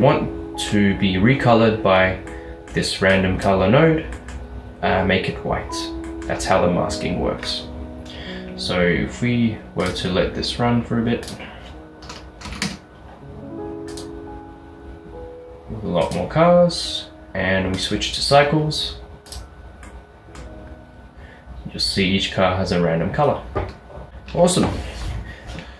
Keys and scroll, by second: 12.5 typing, 12.7 Return.